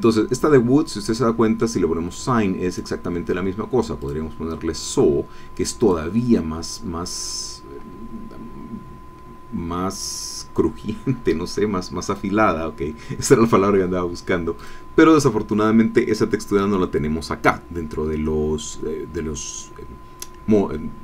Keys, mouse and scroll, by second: 2.7 click, 4.0 click, 5.8 click, 12.1 click, 14.6 click.